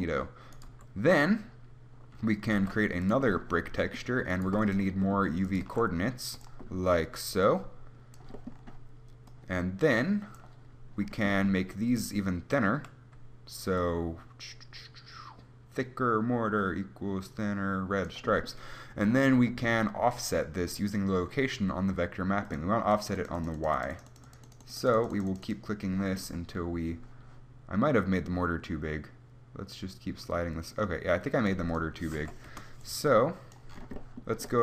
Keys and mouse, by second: 0.8-3.3 right drag, 1.0 g, 2.8 shift+d, 4.2 click, 4.7 g, 5.7-11.8 drag, 5.9 shift+d, 26.5-27.8 drag, 33.1-34.6 drag.